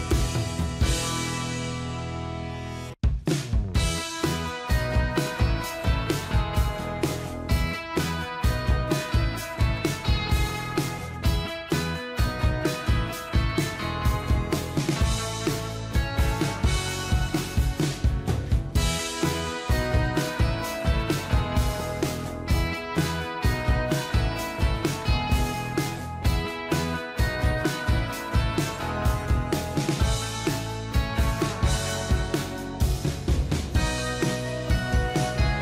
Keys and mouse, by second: 2.0 Down, 2.6 Down, 3.0 Up, 4.8 Down, 5.0 ctrl+-, 5.5 ctrl+-.